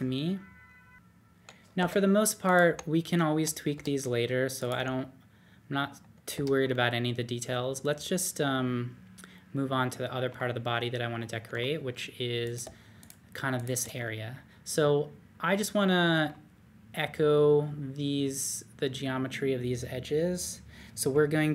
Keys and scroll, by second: 1.8-4.7 typing, 6.3 typing.